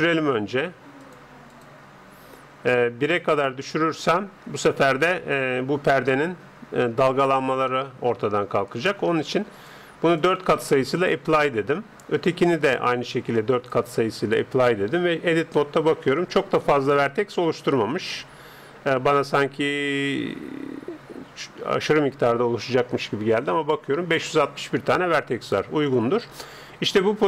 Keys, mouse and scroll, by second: 0.1-3.3 drag, 3.1-5.0 middle drag, 6.0-7.7 scroll up 1, 7.7-9.3 middle drag, 9.2-12.9 drag, 12.1-14.0 right drag, 13.5-15.1 drag, 15.1 Tab, 15.7-18.7 middle drag, 19.2-20.7 scroll up 1, 20.7-24.6 scroll up 1, 24.6-25.4 scroll down 1, 25.4 Tab, 25.4-27.2 middle drag.